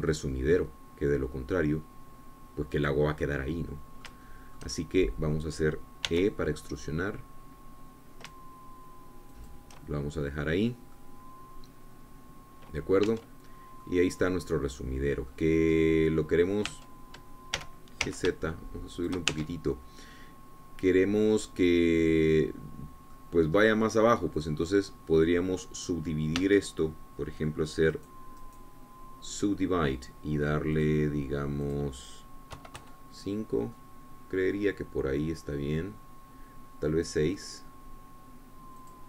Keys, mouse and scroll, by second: 1.0 i, 4.3-5.8 drag, 5.9-7.7 shift+drag, 7.7 e, 11.0 shift+click, 12.0-12.6 scroll down 2, 12.6-14.8 drag, 14.7 Tab, 15.1-15.4 scroll down 2, 15.4-17.1 drag, 17.8 click, 18.3 Tab, 19.2 g, 19.7 z, 20.7 shift+click, 21.0 shift+Tab, 21.4 shift+scroll down 3, 21.8-24.9 drag, 25.3-26.0 scroll down 2, 26.0-28.0 drag, 28.0 Tab, 30.0 click, 30.9 click, 32.4 click, 33.3 click, 34.2 KP_5, 34.4 KP_Enter, 35.4-38.7 middle drag, 38.7-39.0 drag.